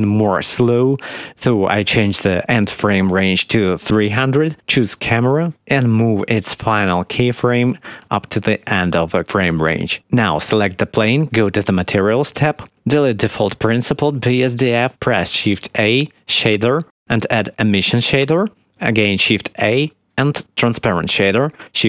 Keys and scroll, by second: 2.9 3, 3.3 0, 3.6 Return, 8.5 g, 8.6 x, 15.4 x, 15.9 shift+a, 19.4 shift+a.